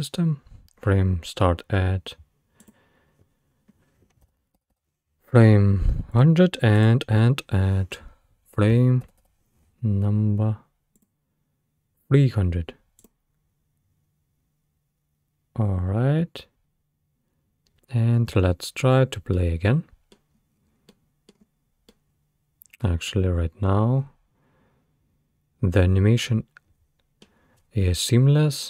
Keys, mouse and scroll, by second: 2.6-4.7 drag, 4.7 0, 6.8-9.2 drag, 9.2 0, 13.0 click, 18.3 space, 19.4-20.4 middle drag, 20.4-20.9 scroll up 3, 20.9-21.4 middle drag, 21.4-21.9 scroll down 2, 21.9-24.9 middle drag.